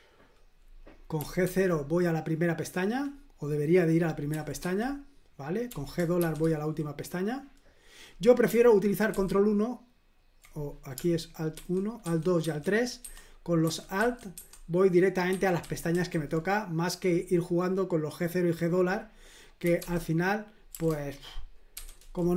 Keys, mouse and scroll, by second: 0.9-1.9 typing, 4.3 typing, 5.7-6.2 typing, 9.1 ctrl+1, 11.6 alt+1, 12.1 alt+2, 12.4 alt+3, 13.0 alt+1, 13.6 alt+2, 14.0 alt+3, 14.4 alt+1, 15.6 a, 19.4-20.7 typing, 21.8 typing.